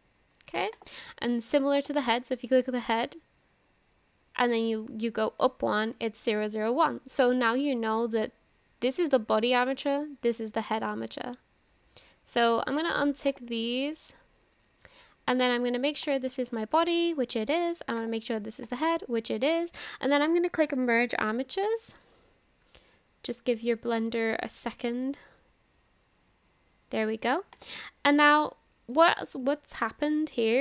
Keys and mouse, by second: 1.8 click, 12.8 click, 13.3 click, 15.4-16.2 drag, 18.0-18.8 drag, 20.6-26.1 drag, 27.5 click, 29.4 shift+middle click, 30.3 click.